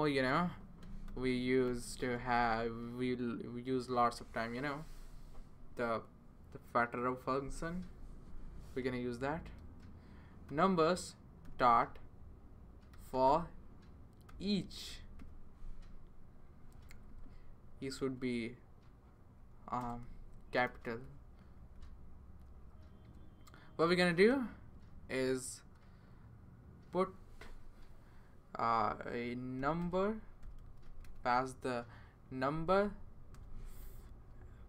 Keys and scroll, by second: 0.5-2.6 typing, 9.6-15.7 typing, 16.9 Left, 17.1 Left, 17.2 Left, 18.0 Left, 19.2 Right, 19.8 BackSpace, 20.6 e, 21.5 Right, 21.7 Right, 22.5 Right, 24.3-24.8 typing, 28.6-31.3 typing, 33.3 =, 34.1 >.